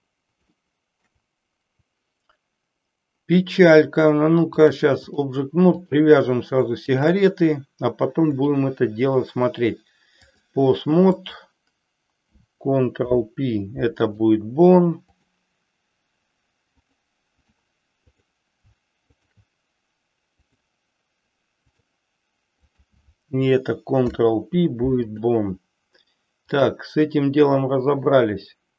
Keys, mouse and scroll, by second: 0.5-1.2 shift+middle drag, 4.7 click, 5.8 drag, 6.9 shift+click, 8.4-10.4 drag, 11.2 click, 12.9 ctrl+p, 15.2 click, 16.8-17.5 drag, 18.2 click, 19.2 shift+drag, 20.4-21.9 drag, 22.7 click, 24.0 ctrl+p, 26.4-28.7 drag.